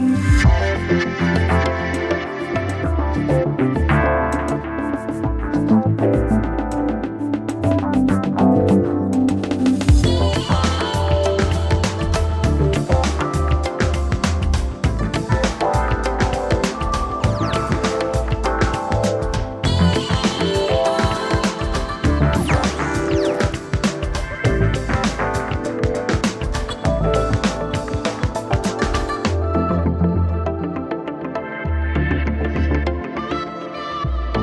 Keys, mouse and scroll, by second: 1.3 alt+click, 9.0 Left, 9.8-11.9 typing, 13.2-14.4 typing, 17.4-18.2 typing, 20.6 0, 26.3 0.